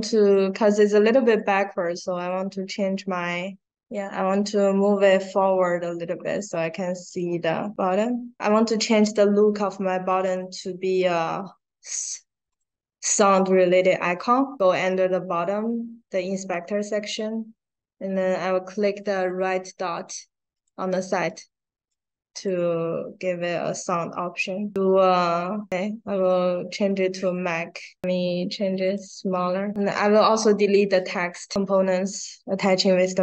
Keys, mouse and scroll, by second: 0.1 click, 2.1 click, 3.7 right click, 5.4 click, 7.0 click, 7.8 right click, 8.9 click, 10.1 click, 12.4 click, 21.8 click, 23.1 middle click, 26.8 click, 28.8 click, 30.0 click, 32.0 click.